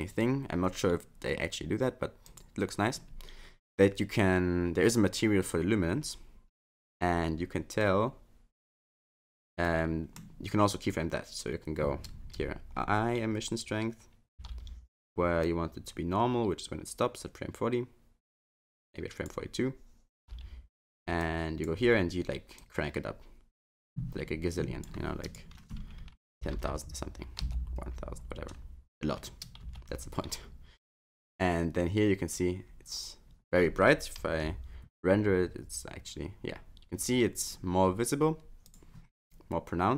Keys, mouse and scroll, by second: 0.1-2.3 scroll down 3, 2.3 click, 6.0-7.3 scroll up 7, 7.8 click, 9.6 middle click, 10.6-11.8 scroll up 1, 14.4 i, 15.4 click, 20.2 i, 21.2 click, 22.6 click, 25.3 click, 26.5 0, 26.7 0, 29.6 i, 30.9 click, 38.7 F12.